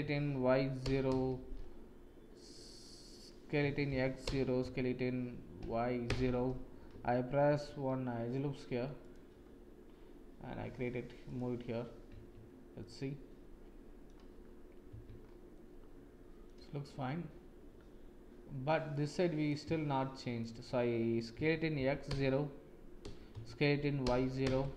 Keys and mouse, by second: 3.5 s, 7.4 ctrl+r, 12.3 Tab, 12.7-14.0 middle drag, 14.9 Tab, 15.5 middle click, 20.1 shift+click, 21.3 s, 23.3 s.